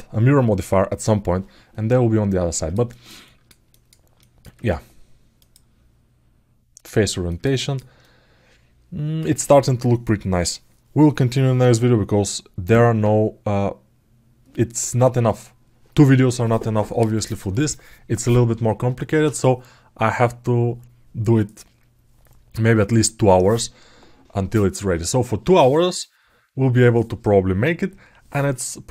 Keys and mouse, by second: 2.3 ctrl+alt+middle click, 3.0 alt+shift+middle click, 3.4 alt+middle click, 3.9 alt+shift+middle click, 5.1-6.9 drag, 7.0 alt+middle click, 7.3 ctrl+alt+middle click, 7.8-8.9 alt+middle drag.